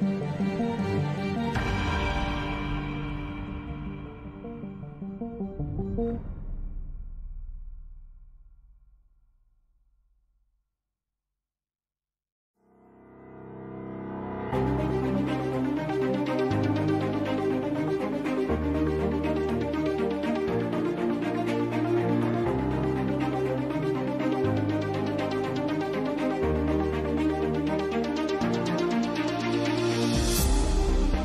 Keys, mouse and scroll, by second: 1.1-2.5 drag, 2.9 click, 4.0-6.1 drag, 6.1-6.5 middle drag, 6.5-7.0 drag, 7.4 click, 7.9 n, 8.2 a, 8.3 ctrl+s, 9.5-10.5 drag, 9.7 s, 13.6-15.0 typing, 17.0 Tab, 17.2 Tab, 17.5-19.8 typing, 21.2 g, 23.2 KP_5, 24.2 s, 24.8 Tab, 25.0 Tab, 25.2 Tab, 25.6 shift+s, 26.1 Tab, 26.2 shift+a, 30.9 n, 31.1 n.